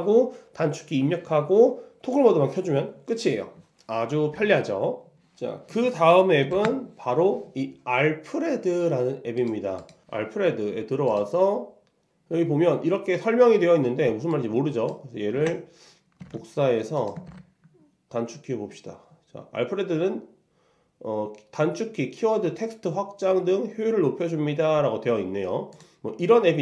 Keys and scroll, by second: 6.6 shift+super+;, 15.4 super+c, 17.4 super+v.